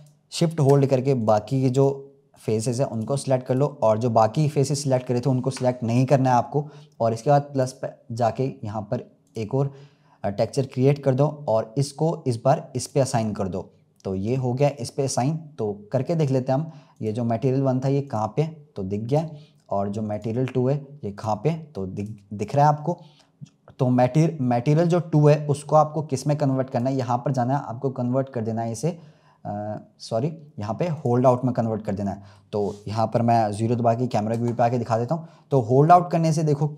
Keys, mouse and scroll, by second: 1.1 shift+click, 1.6 shift+click, 2.2 shift+click, 2.8 shift+click, 3.4-6.4 shift+drag, 7.4-12.3 drag, 12.7-14.6 drag, 16.8 click, 18.0-19.1 drag, 20.0 click, 21.1 click, 26.6-29.8 drag, 32.0-34.2 middle drag, 34.2 KP_0, 35.2-35.5 scroll down 1.